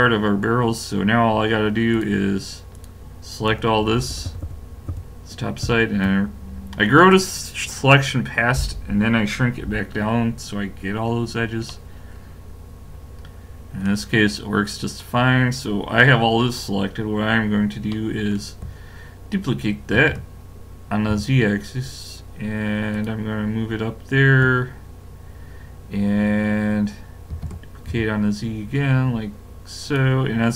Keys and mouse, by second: 1.5 middle click, 1.9-4.1 drag, 3.8-4.1 ctrl+KP_Add, 4.3 ctrl+KP_Add, 4.4 ctrl+KP_Add, 4.9 ctrl+KP_Add, 5.6 ctrl+KP_Subtract, 11.3-12.4 middle drag, 12.9 middle click, 14.1-20.0 middle drag, 20.0 shift+d, 23.5-24.7 middle drag, 27.3 shift+d.